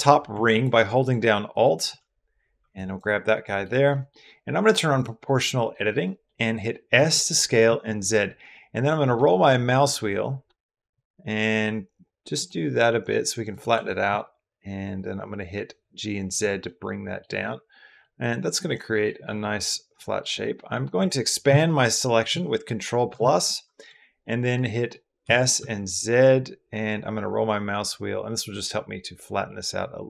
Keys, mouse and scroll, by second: 0.3 alt+click, 0.8 alt+click, 1.4 alt+click, 2.5 b, 3.1 middle click, 3.7 middle click, 4.8 scroll up 1, 5.3 middle click, 5.8 middle click, 6.8 s, 7.5 z, 13.3 click, 13.5 g, 13.9 z, 16.1 click, 16.4 click, 17.3 click, 18.0 click, 18.5 click, 19.1 middle click, 20.2 middle click, 21.3 ctrl+KP_Add, 22.0 ctrl+KP_Add, 22.9 ctrl+KP_Add, 24.0 middle click, 25.0 s, 25.4 z, 29.9 click.